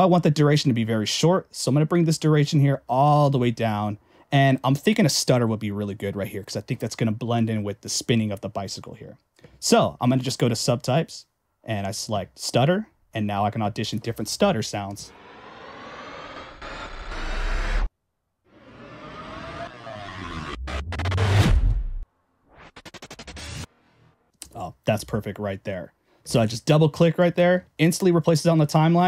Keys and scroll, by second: 27.4 Escape.